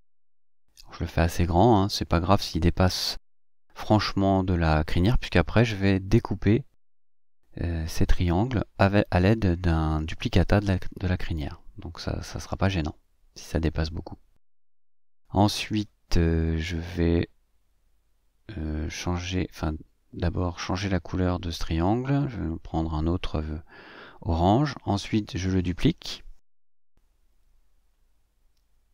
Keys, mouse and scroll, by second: 4.1 click, 5.6 click, 9.4 click, 10.5 click, 11.9 click, 13.5 click, 17.8 ctrl+d, 22.5 click.